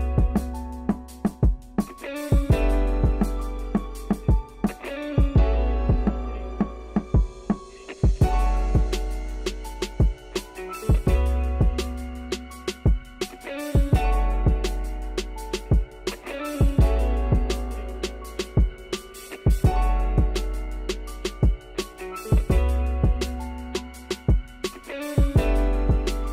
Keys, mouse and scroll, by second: 4.7 click, 5.3 click, 5.6 middle click, 5.9 scroll up 2, 6.1-8.4 middle drag, 8.4 click, 9.3 Tab, 10.9 click, 14.0 middle click, 14.3 ctrl+z, 14.7 middle click, 15.1 click, 15.2 middle click, 15.6 shift+click, 15.7 middle click, 16.0 shift+click, 16.1 middle click, 16.3 shift+click, 16.6 middle click, 17.1 shift+click, 17.3 middle click, 17.9 a, 18.5 a, 18.8 middle click, 19.5 a, 19.7 middle click, 20.2 scroll up 1, 20.4 shift+middle click, 20.6 scroll down 1, 20.7 shift+middle click, 21.1-21.8 scroll up 1, 21.8 scroll up 1, 21.8 s, 23.6 r, 24.4 Tab, 24.5-25.8 middle drag, 26.0-26.3 drag.